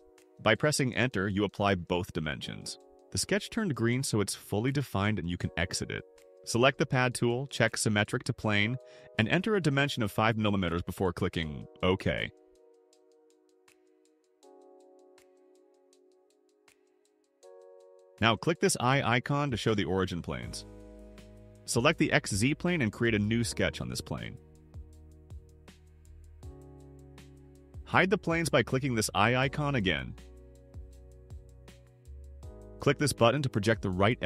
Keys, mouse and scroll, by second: 1.4 Return, 3.7 click, 7.1 click, 9.6 5, 11.0 click, 13.9 click, 19.7 click, 21.4 click, 22.4 click, 26.4 click, 29.0 click, 30.5 middle click, 30.8 middle click.